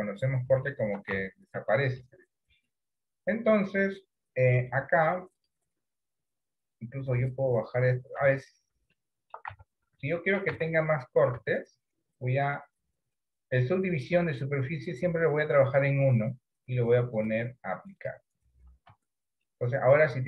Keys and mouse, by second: 0.8 shift+middle click, 1.3 Tab, 1.9 middle click, 5.5 click, 7.4 click, 8.3 Tab, 9.0 shift+middle click, 9.6 Tab, 10.1 shift+middle click, 10.7 Tab, 11.4 Tab, 17.3 click, 19.0 Tab, 19.5-20.2 middle drag.